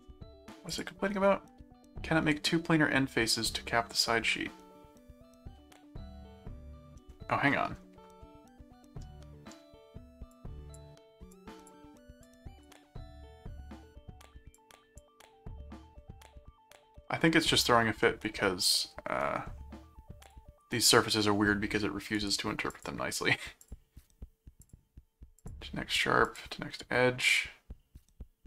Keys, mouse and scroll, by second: 0.7 click, 4.3-7.1 middle drag, 8.2-9.5 middle drag, 10.3 click, 11.3 click, 12.3 click, 14.6 click, 18.0-19.5 middle drag, 20.2 click, 22.1 right click, 22.7 click, 23.6 click, 24.6 click, 25.4 click, 26.3 click.